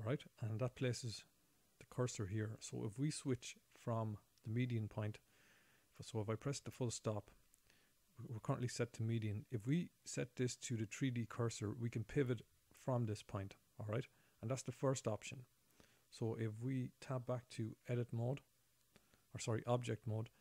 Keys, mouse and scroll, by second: 5.5 ., 15.2-16.3 scroll down 7, 18.2 Tab.